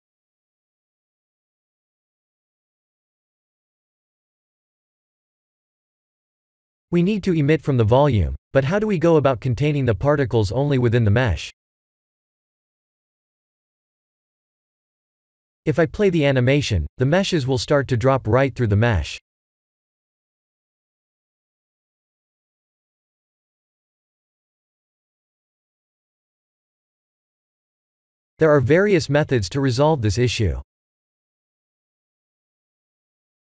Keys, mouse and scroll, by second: 2.8 click, 3.9 click, 5.5 click, 7.5 click, 8.7-9.8 drag, 13.6 click, 16.9 click, 18.5 click, 19.8-22.2 middle drag, 22.8-23.1 middle drag, 32.9-33.4 drag.